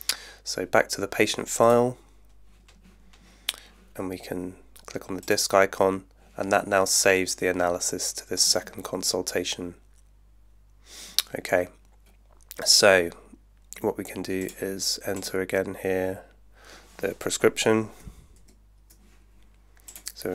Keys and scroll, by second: 18.4 super+F2.